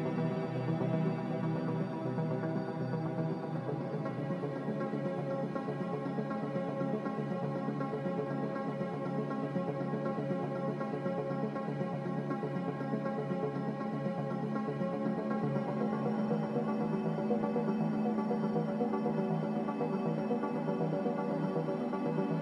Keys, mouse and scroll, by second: 2.8 m, 3.5 Escape, 18.5-19.6 typing, 21.1 (.